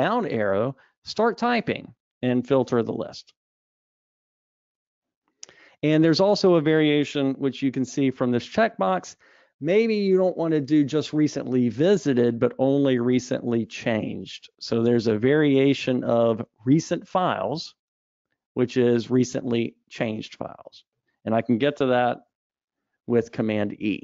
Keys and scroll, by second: 8.3 super+e, 22.7 super+e.